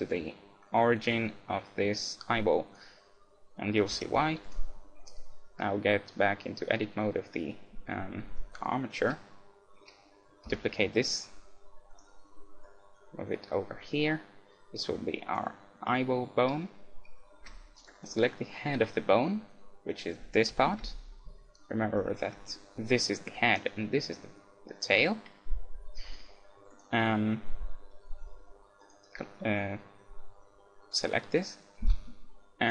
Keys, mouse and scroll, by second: 2.7-4.4 right drag, 3.9 Tab, 4.5-6.2 right drag, 10.5 shift+d, 12.7-14.4 drag, 15.2-17.6 middle drag, 17.4 z, 17.9-19.7 right drag, 19.7-21.4 middle drag, 20.5 KP_1, 20.8 KP_Decimal, 21.4-23.4 middle drag, 23.5-29.2 middle drag, 26.7-28.5 right drag, 28.9-30.7 right drag, 31.8 shift+s.